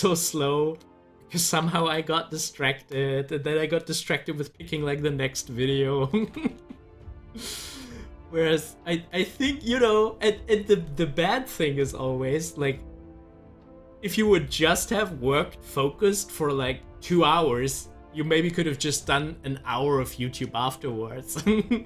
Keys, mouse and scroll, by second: 1.5 Left, 2.5-6.5 drag, 6.5 z, 7.1-10.4 drag.